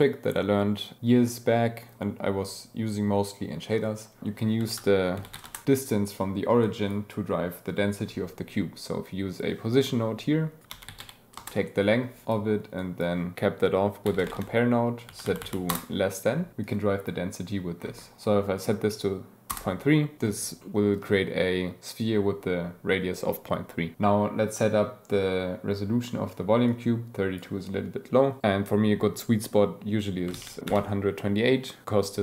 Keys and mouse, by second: 4.6 shift+a, 6.0 click, 6.7 click, 10.6 click, 12.2 drag, 12.8 drag, 15.2 Down, 15.4 Down, 16.6-17.4 drag, 20.6-21.0 drag, 26.7-32.2 drag.